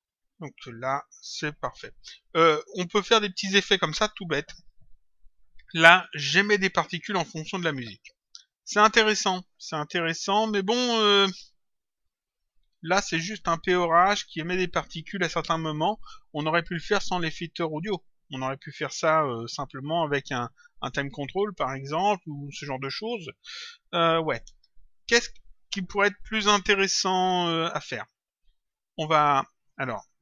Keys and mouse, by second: 4.5 click.